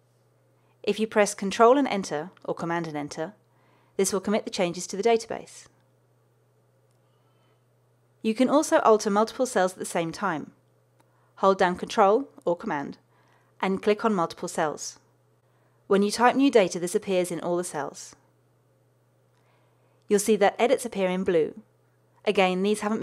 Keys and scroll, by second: 2.5 super+Return.